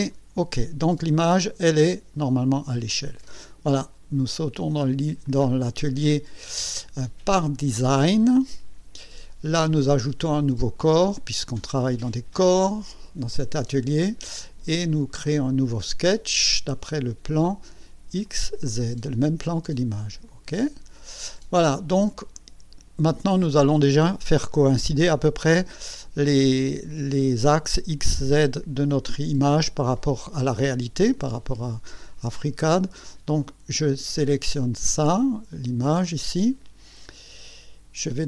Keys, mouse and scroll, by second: 0.1 click, 1.0 scroll up 2, 1.8-2.7 right drag, 3.1 scroll up 2, 5.2 click, 7.3 click, 9.0 click, 12.4 click, 13.8 scroll down 1, 15.4 click, 18.2 click, 20.3 click, 21.5 scroll down 1, 22.3-23.1 right drag, 33.3 click, 34.3 click.